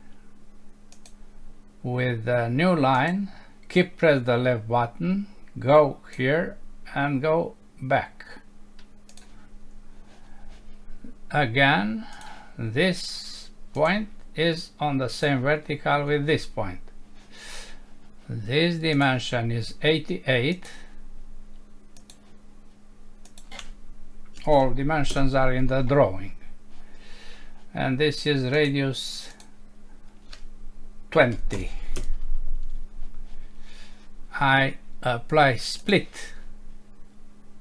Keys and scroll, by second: 25.1 Return, 32.0 Return.